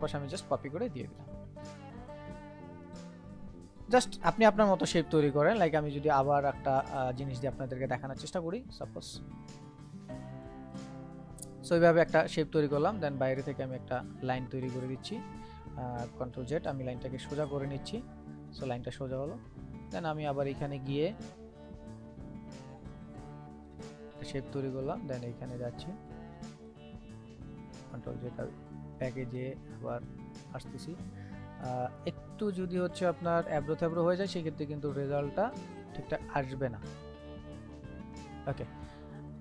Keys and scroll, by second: 15.9 ctrl+z, 27.7 ctrl+z, 30.8 ctrl+z.